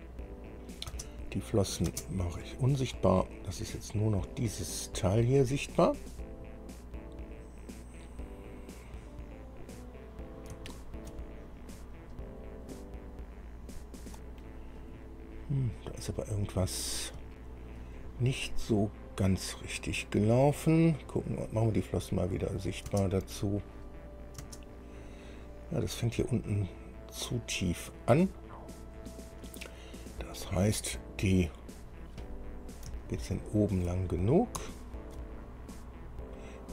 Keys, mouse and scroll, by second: 0.7 click, 1.1 space, 1.8 click, 2.1 space, 3.2 scroll down 1, 3.8-4.4 scroll up 1, 5.2-6.0 scroll up 3, 6.6 scroll up 1, 8.4-10.9 middle drag, 11.7-12.4 shift+scroll up 2, 13.0-14.8 middle drag, 15.0 scroll down 1, 15.5-15.8 scroll up 1, 16.4 middle click, 17.6-18.8 shift+middle drag, 19.3-19.7 scroll up 2, 20.0 scroll down 2, 22.6 click, 23.1 space, 24.1 click, 24.6 space, 26.3-27.7 middle drag, 32.8-33.1 scroll down 2, 33.2-34.2 shift+middle drag, 34.6 scroll down 3, 34.9 shift+middle click, 35.7-36.2 shift+scroll up 1.